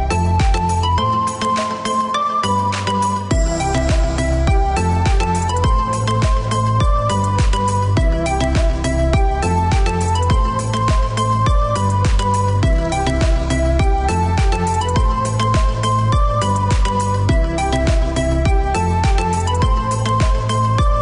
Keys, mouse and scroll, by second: 0.9 click, 2.2 space, 3.2 click, 3.8 click, 4.8 scroll down 1, 6.6 click, 7.8 click, 9.4 click, 11.4 click, 14.4 click, 17.2 click, 17.8 click, 18.6 KP_9, 18.9 KP_Decimal, 19.2 KP_9, 19.6 KP_Enter, 20.2 Escape.